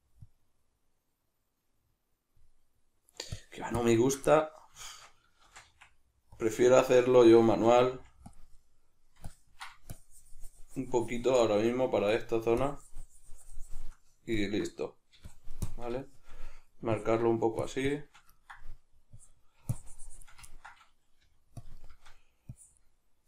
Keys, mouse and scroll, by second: 4.3-6.5 middle drag, 5.5 shift+c, 5.7 f, 6.5 click, 6.7-8.3 shift+middle drag, 7.9 f, 8.3 click, 9.3-11.5 ctrl+drag, 11.5 shift+middle click, 12.1-16.0 drag, 16.0-17.0 shift+middle drag, 17.0-18.4 ctrl+drag, 18.4 ctrl+middle click, 19.2-20.4 drag, 20.4-22.5 ctrl+middle drag, 21.2 f, 21.6 click, 22.5 click.